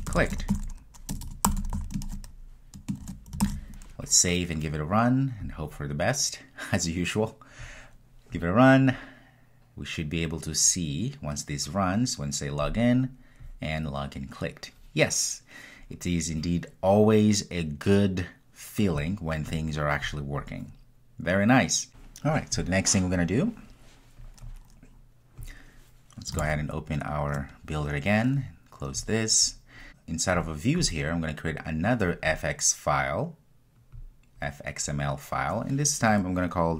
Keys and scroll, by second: 3.5 super+s, 5.5 super+F2, 7.7 ctrl+r.